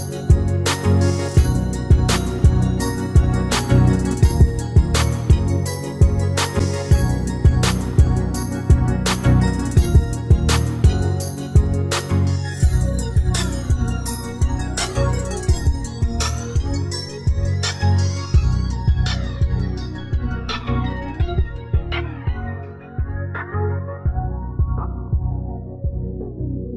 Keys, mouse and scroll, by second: 0.1 space, 2.3 click, 5.7 click, 6.7 click, 7.5-8.7 middle drag, 9.1 right click, 9.6 middle click, 10.1 ctrl+z, 10.3 ctrl+z, 10.5 ctrl+z, 10.7 ctrl+z, 11.2 right click, 12.7-14.6 right drag, 14.2-15.9 typing, 16.2 right click, 16.7 ctrl+l, 17.6 click, 18.8-19.8 middle drag, 20.0 middle click, 20.7 click, 21.6-23.1 middle drag, 23.1 click, 25.9 a, 26.2 a.